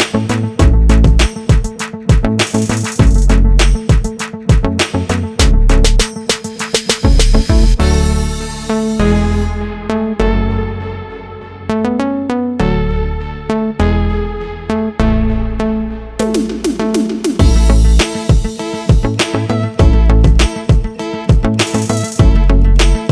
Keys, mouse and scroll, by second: 2.5 click, 3.1 click, 3.7 click, 4.6 right click, 5.9 i, 8.0 click, 11.5-11.9 scroll down 1, 12.0 click, 13.4 click, 14.5 click, 15.9 i, 16.9 click, 19.0 click, 19.6 scroll down 2, 20.3 click, 22.8 i.